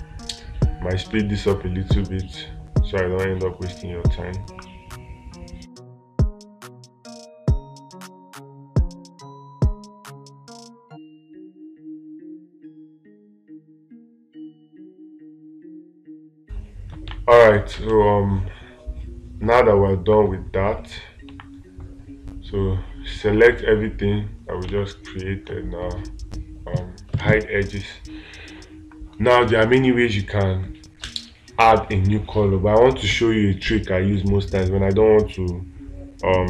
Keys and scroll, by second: 16.7 space.